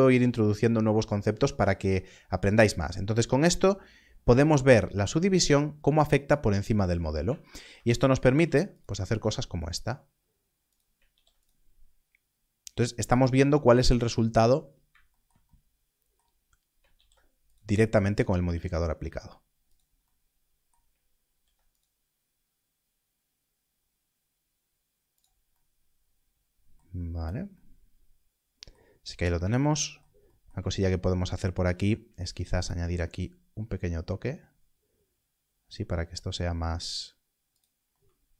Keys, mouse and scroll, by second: 6.5 scroll up 1, 8.2 ctrl+r, 10.6 ctrl+r, 11.0 click, 14.5 scroll down 1, 16.3-16.7 scroll up 1, 16.8 ctrl+r, 17.4 click, 19.6 click, 21.2 ctrl+r, 26.9 scroll down 1, 29.0 scroll up 1, 32.2 ctrl+r, 37.5 click.